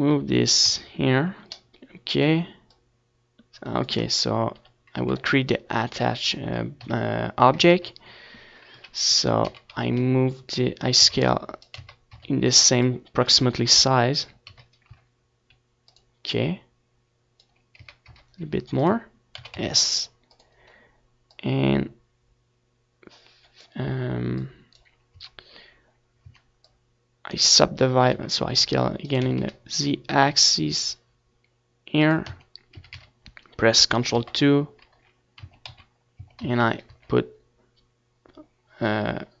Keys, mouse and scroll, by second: 0.4 KP_1, 1.4 ctrl+KP_1, 2.3 KP_3, 2.6 z, 3.1 z, 3.4-4.5 middle drag, 4.5 s, 5.3-7.0 right drag, 5.4 s, 6.3-8.6 drag, 6.9 middle click, 8.1 s, 9.5-11.7 drag, 11.5 s, 12.5-16.4 drag, 13.0 s, 17.8-19.3 drag, 18.5 Tab, 19.5 Tab, 20.0-21.5 drag, 21.4 s, 22.3-24.1 right drag, 22.3 s, 25.2-27.0 drag, 25.4 Tab, 25.9 a, 26.0 a, 27.2 ctrl+2, 28.0 z, 28.2 middle click, 28.4 Tab, 28.7 z, 29.2 Tab, 29.4 a, 29.8 ctrl+r, 38.8-39.4 drag, 38.9 a.